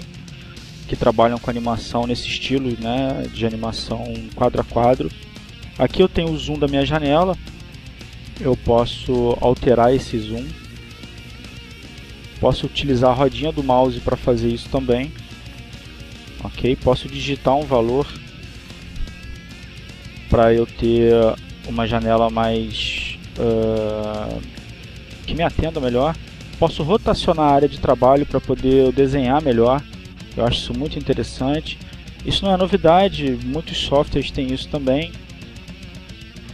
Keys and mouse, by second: 7.9-11.2 drag, 11.7 click, 12.6 click, 15.0-16.1 drag, 17.9 click, 19.1 3, 19.7 Return, 28.2 click, 29.3 click, 30.3 click, 31.2 click, 31.8 click, 32.7 click, 33.8 click, 34.5-35.8 drag, 36.1 click.